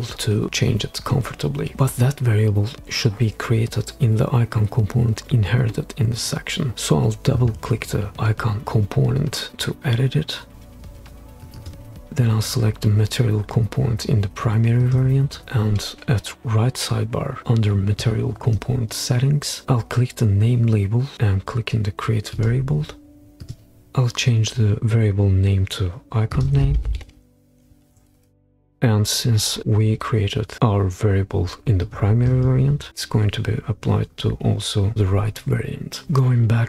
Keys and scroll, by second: 27.1 super+BackSpace, 27.9-28.7 typing.